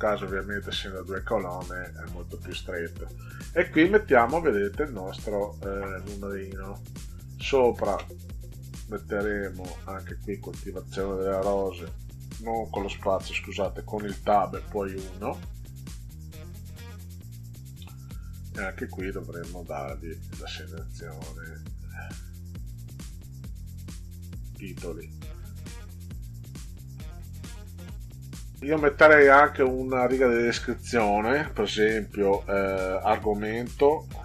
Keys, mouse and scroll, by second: 7.0 click, 7.9 space, 13.9 Tab, 17.3 click, 20.9 click, 22.6 click, 24.7 click, 29.2 click, 33.3 shift+a.